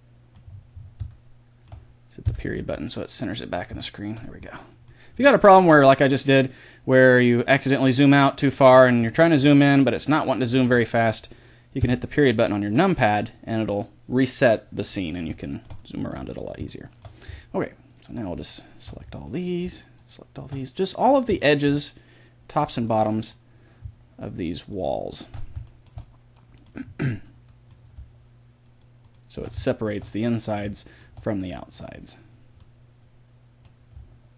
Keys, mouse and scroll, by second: 2.2 KP_Decimal, 5.7-11.8 middle drag, 11.8 KP_Decimal, 14.6 middle click, 15.5-21.8 middle drag, 23.3-24.6 middle drag, 24.6 click, 24.9-26.7 middle drag, 28.7-29.9 middle drag, 29.9 click, 30.4-34.3 middle drag.